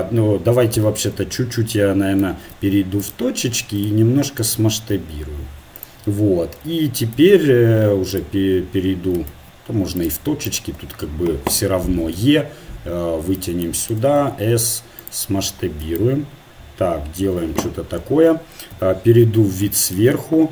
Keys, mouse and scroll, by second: 0.8 z, 2.2 ctrl+Tab, 3.6 a, 4.9 s, 7.2 ctrl+Tab, 9.3 ctrl+Tab, 10.4-11.7 right drag, 12.2 e, 14.2 s, 18.7 KP_7.